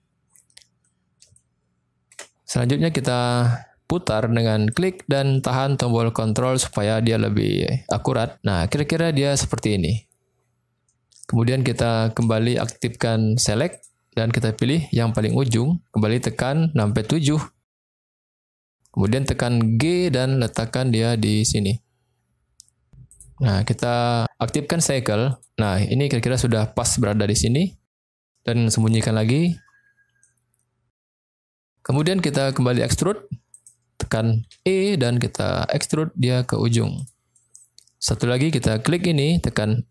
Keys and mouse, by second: 1.3 shift+middle click, 4.7-9.1 drag, 11.2 middle click, 12.4 shift+middle click, 12.9 middle click, 13.7 click, 15.2 click, 17.0 KP_7, 19.7 g, 25.2 click, 29.3 click, 30.2 middle click, 31.6 shift+middle click, 32.2 middle click, 33.5 click, 34.4 e, 37.2 middle click, 38.9 click.